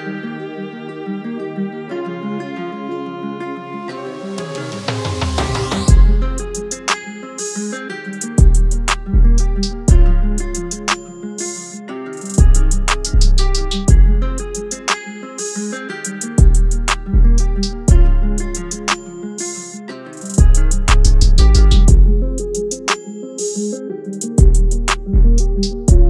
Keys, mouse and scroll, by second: 0.9-3.4 drag, 4.2 Tab, 7.5 click, 16.8 click, 18.1 Tab, 19.5 click, 25.8 Tab.